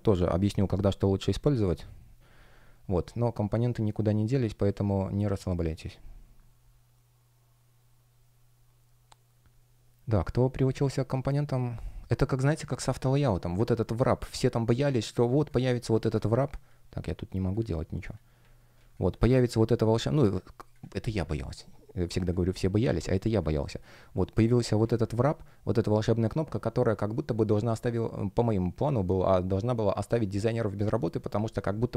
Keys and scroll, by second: 15.6 space, 24.7 shift+a.